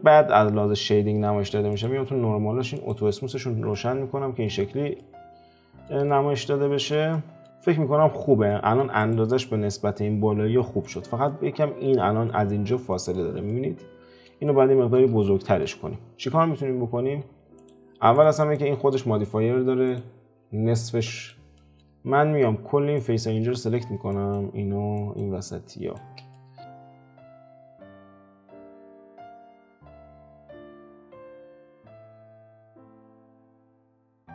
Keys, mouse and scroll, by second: 1.7 click, 2.7 click, 3.2 click, 3.7-7.4 middle drag, 7.4 click, 7.6-9.0 middle drag, 9.0 click, 9.4-10.8 middle drag, 10.8 click, 11.2-17.0 middle drag, 17.0 alt+q, 17.5 click, 18.1 click, 18.4 click, 19.8 click, 21.1 click, 21.5-22.9 shift+middle drag, 23.0 click, 24.1 shift+click, 24.9 shift+click, 25.7 shift+click, 26.3-27.4 middle drag, 27.4 ctrl+KP_Add, 27.8-29.0 middle drag, 29.0 `, 29.3-30.8 middle drag, 30.8-31.3 scroll down 1, 31.3-32.8 shift+middle drag, 32.8 shift+drag, 33.2 shift+drag, 33.6-34.2 scroll down 11, 34.2-34.3 middle drag.